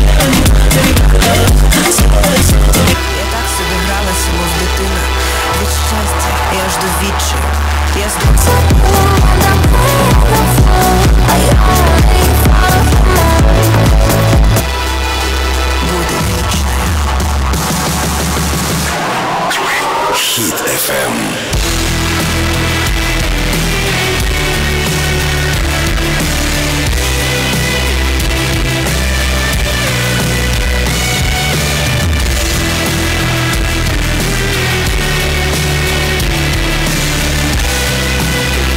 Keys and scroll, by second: 3.3 Page_Down, 15.3 Page_Down.